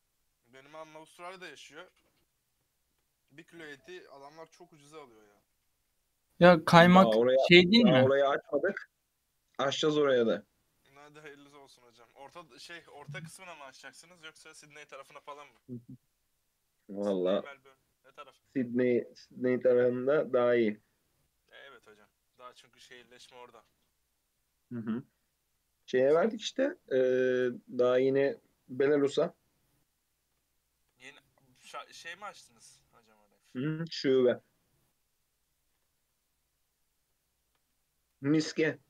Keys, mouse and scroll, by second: 1.4 3, 1.5 click, 2.8 shift+middle click, 3.7 e, 5.6 g, 12.3-13.5 middle drag, 13.5 KP_3, 14.4-15.1 shift+middle drag, 15.1 ctrl+r, 18.3 Tab, 18.7 alt+z, 18.8-19.2 scroll down 2, 19.2-20.6 middle drag, 20.6-21.1 scroll down 2, 21.1-22.5 middle drag, 22.5 scroll down 2, 22.7-24.2 middle drag, 24.2-24.6 scroll up 2, 24.6-27.2 middle drag, 27.2 click, 27.5 click, 27.8 g, 29.6 KP_3, 29.9-30.6 scroll up 3, 30.6-31.2 shift+middle drag, 31.2 Tab, 31.5-32.4 scroll up 6, 32.4 ctrl+r, 36.0 Tab, 36.1 scroll down 2, 36.3-37.8 middle drag, 37.8 scroll down 2, 38.0-38.5 middle drag, 38.5 KP_3.